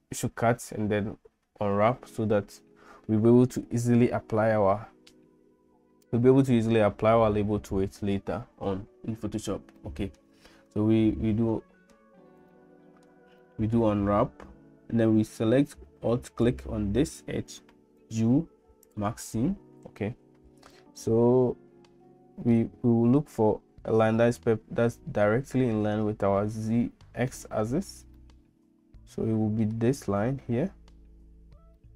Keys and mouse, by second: 9.8 shift+middle click, 11.6 shift+middle click, 12.5 middle click, 13.4 shift+middle click, 16.3 alt+click, 18.0 u, 20.8-22.6 middle drag, 27.3 shift+middle click, 28.2-29.7 middle drag, 31.8 middle click.